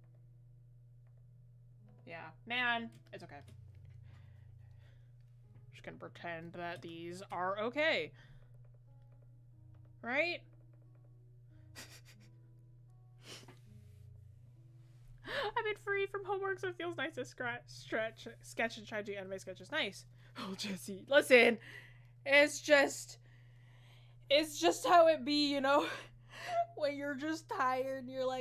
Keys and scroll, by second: 16.3 scroll up 1.